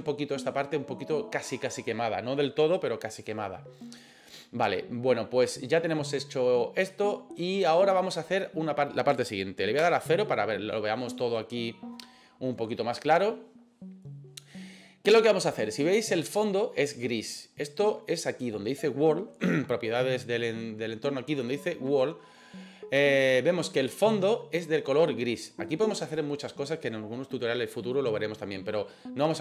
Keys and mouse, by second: 9.8 KP_0.